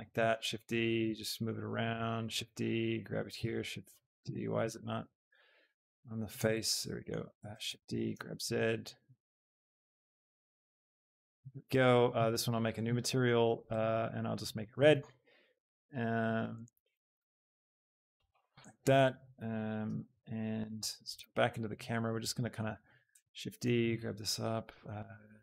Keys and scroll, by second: 0.1 shift+d, 0.5 Escape, 1.2 g, 2.3 shift+d, 4.5 g, 6.0 g, 7.8 Escape, 7.8 shift+d, 8.2 z, 9.3 g, 22.8 shift+d, 23.2 Escape, 23.6 g, 23.9 z.